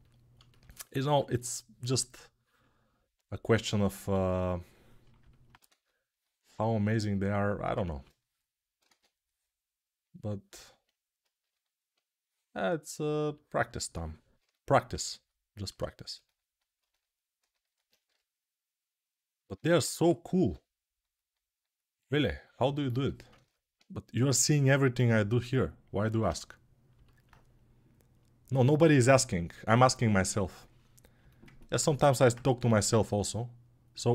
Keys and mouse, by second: 1.9 ctrl+1, 4.8-16.1 alt+drag, 8.8 ctrl+z, 17.8 g, 27.0-32.1 right drag, 32.1-34.1 alt+drag.